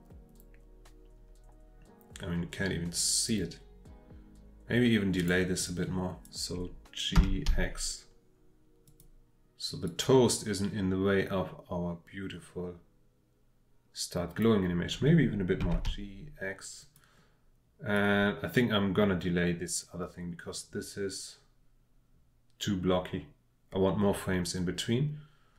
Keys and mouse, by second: 5.6-6.2 drag, 7.2 g, 7.5 x, 8.9 click, 9.9-14.4 drag, 15.6 g, 15.9 x, 16.8 click, 17.9-25.5 drag.